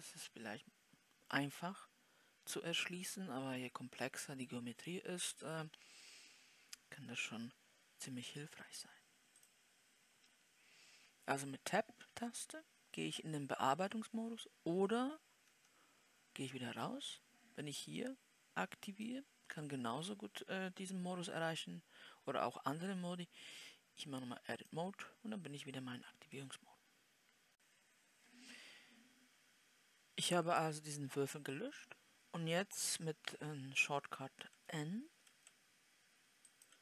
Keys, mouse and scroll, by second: 8.7-9.8 scroll up 1, 9.8-26.9 drag, 26.9 middle click.